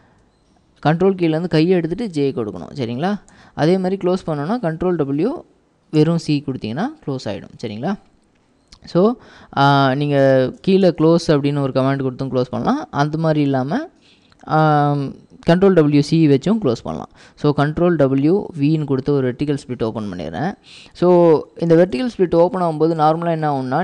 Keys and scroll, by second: 3.3 ctrl+w, 3.5 k, 4.9 ctrl+w, 6.1 c, 10.9-13.0 typing, 17.9 ctrl+w, 19.0 ctrl+v, 21.8-23.8 typing.